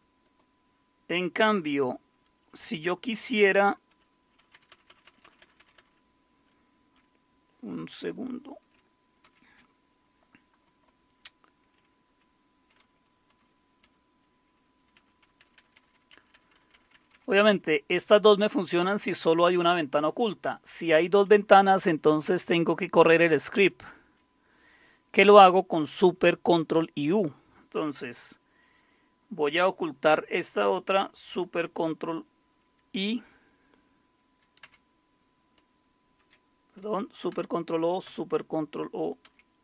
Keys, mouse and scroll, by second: 0.2 click, 3.9-5.0 typing, 8.1 click, 9.2 ctrl+super+o, 9.2 typing, 10.4-11.1 typing, 10.6 click, 13.0-13.8 typing, 14.9-16.3 typing, 21.2 typing, 23.7 typing, 34.6 ctrl+super+i, 37.3 ctrl+super+o, 38.0 ctrl+super+i, 39.2 ctrl+super+o.